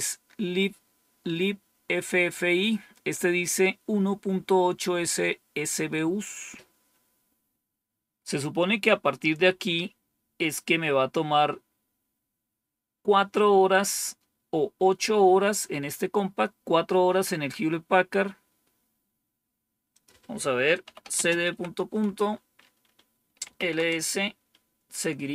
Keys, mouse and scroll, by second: 18.8-19.7 scroll down 1, 19.8 click, 20.5-21.9 typing, 23.1-23.8 typing.